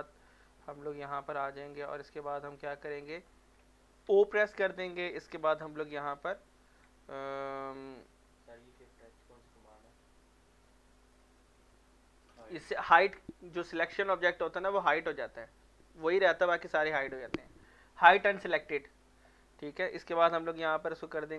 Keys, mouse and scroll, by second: 1.0-4.1 drag, 4.1 o, 8.4-8.7 z, 9.3 middle click, 9.7 shift+middle click, 17.9 middle click, 18.4 shift+middle click, 19.0-19.4 scroll up 1, 19.4 middle click.